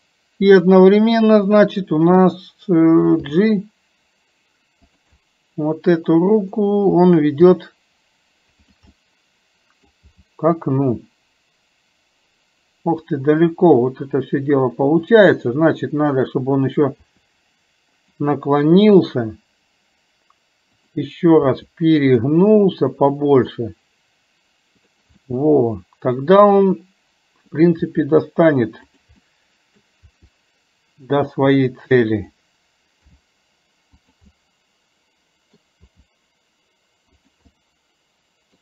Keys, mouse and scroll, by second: 0.6 click, 1.6-2.5 middle drag, 5.2-6.6 middle drag, 9.0 middle click, 14.0 middle click, 16.1 click, 20.9 click, 25.2-27.5 middle drag, 29.3 middle click, 34.4-35.6 middle drag, 37.5-38.6 middle drag.